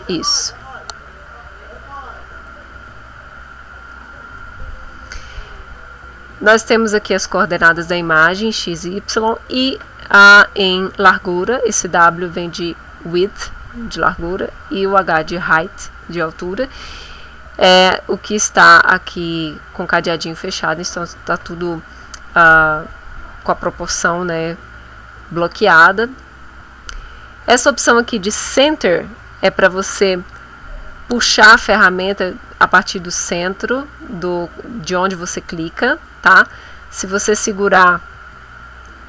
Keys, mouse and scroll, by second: 2.0 click, 4.0 click, 32.8-39.0 drag.